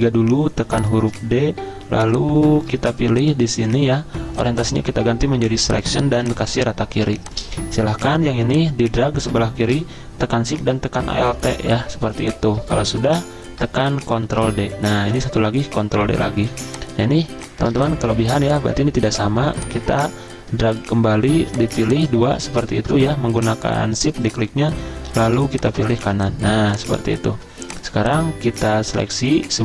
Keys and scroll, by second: 14.2 ctrl+d, 15.7 ctrl+d, 16.5 z, 18.2 v, 22.4 z, 25.2-27.4 typing.